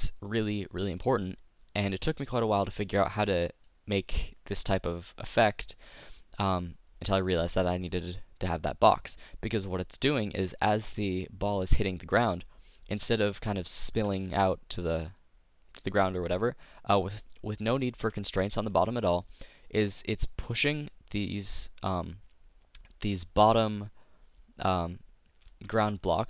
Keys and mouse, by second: 3.6-9.3 middle drag, 10.6 middle click, 11.5-13.3 drag, 13.3-15.1 middle drag, 15.2 middle click, 17.9 z, 18.7 z, 20.4 z, 25.4 z.